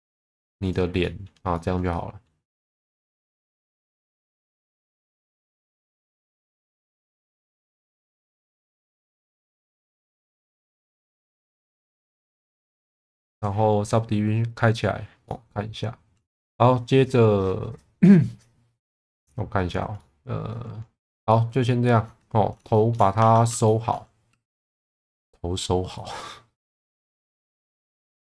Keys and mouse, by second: 1.0 middle click, 1.5 shift+middle click, 1.9 middle click, 5.4 click, 6.4 shift+middle click, 7.2 shift+middle click, 7.6 middle click, 8.8 middle click, 9.3 alt+middle click, 11.3 Tab, 11.6 click, 12.0 ctrl+s, 13.3 click, 15.2-16.3 middle drag, 20.0 middle click, 21.3 middle click, 22.7 shift+middle click, 23.2 Tab, 23.6 shift+middle click, 24.3 2, 24.6 3, 26.0 click, 26.1 click, 27.5 shift+middle click, 27.8 Tab.